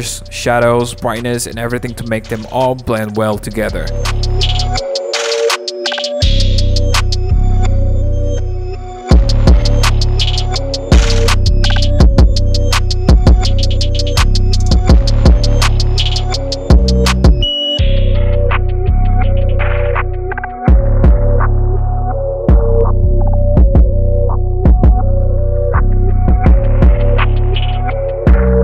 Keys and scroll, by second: 5.4 super+z, 6.3-7.3 typing, 8.4 super+z, 8.9-11.6 typing, 12.7 super+z, 13.0-14.4 typing, 16.0 super+0, 16.0 super+-, 16.1 super+-, 16.3 super+0, 16.4 super+=, 16.5 super+=, 16.8 super+-, 16.9 super+-, 16.9 super+0, 17.0 super+=, 17.1 super+=, 17.2 super+0, 18.3-19.5 typing, 19.4 super+0, 19.5 super+=, 20.0 alt+super+e, 24.0 super+-, 24.1 super+-, 24.3 super+-, 24.3 super+0, 24.3 super+=, 25.1 super+-, 25.2 super+-, 25.2 super+0, 25.3 super+=, 26.4-28.6 typing.